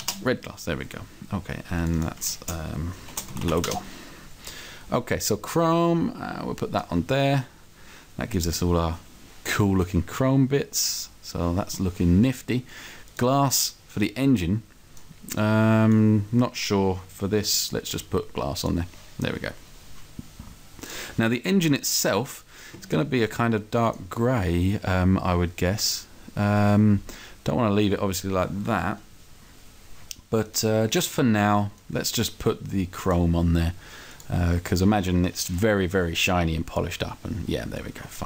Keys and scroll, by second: 3.1 shift+l, 3.6 o, 3.8 Return.